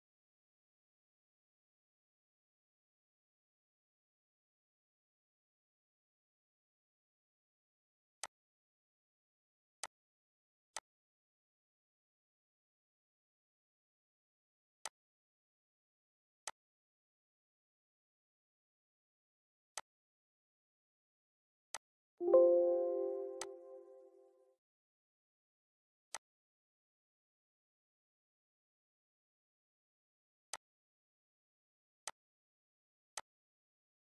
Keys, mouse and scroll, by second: 0.2 middle click, 0.7 scroll up 1, 2.1 scroll down 1, 2.2-5.9 shift+middle drag, 7.2 click, 10.9 scroll down 1, 13.8 click, 14.2 scroll up 1, 15.4-18.7 drag, 23.6 scroll down 1, 25.1 click, 26.4 scroll up 1, 29.5 click, 33.3 scroll down 1, 33.8 middle click.